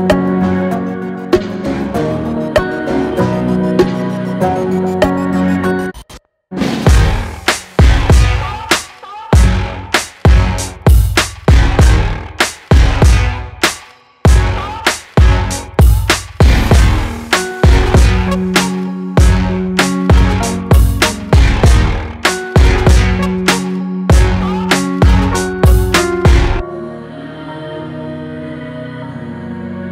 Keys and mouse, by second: 4.5-6.7 drag, 13.0-14.7 drag, 17.6-21.8 drag, 22.2 click, 22.9-24.7 drag.